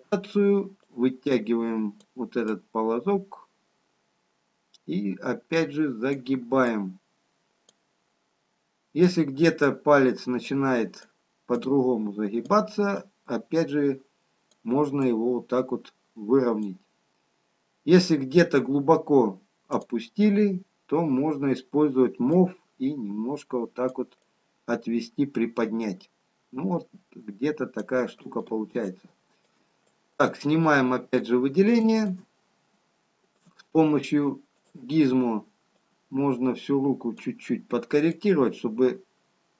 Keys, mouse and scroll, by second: 9.6 click.